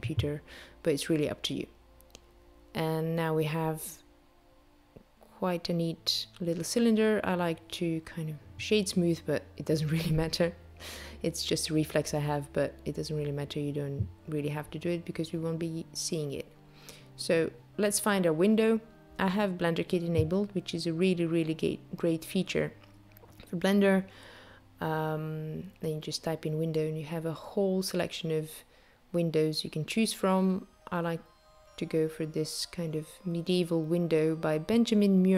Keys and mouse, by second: 4.9 a, 5.9 Tab, 7.8 right click, 15.0 click, 24.0 click.